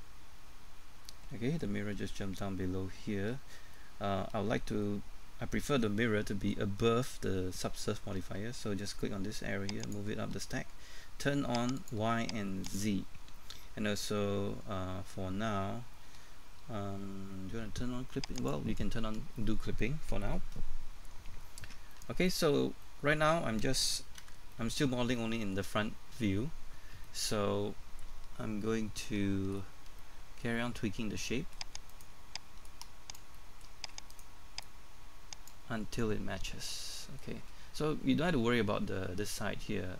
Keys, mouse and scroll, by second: 1.1 middle click, 9.8 click, 20.8-21.7 scroll up 1, 21.9 shift+middle click, 22.4-22.8 scroll up 1, 22.8 middle click, 24.2 KP_1, 24.5 middle click, 30.0 shift+middle click, 31.9 right click, 32.7 click, 33.4 shift+middle click, 34.1 right click, 34.6-36.2 drag, 36.6 shift+middle click.